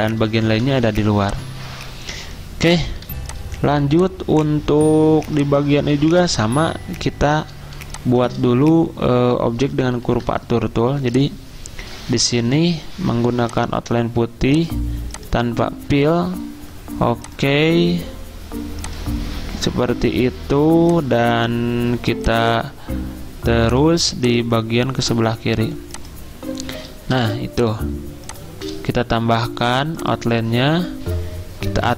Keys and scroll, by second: 0.5 v, 3.1 z, 10.1 ~, 12.4 d, 27.1 v.